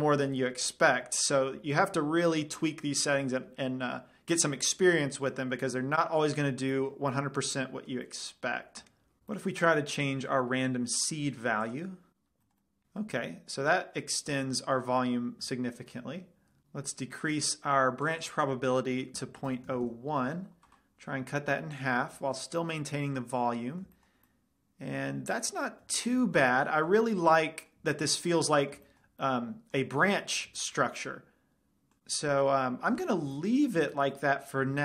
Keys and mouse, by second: 6.0 middle click, 7.0-9.2 middle drag, 9.3-10.4 middle drag, 10.4-13.0 drag, 10.9-16.2 middle drag, 18.5-20.2 drag, 21.5-23.1 middle drag, 22.3-23.1 drag, 23.9 middle click, 27.8-29.6 middle drag, 33.9-34.4 middle drag.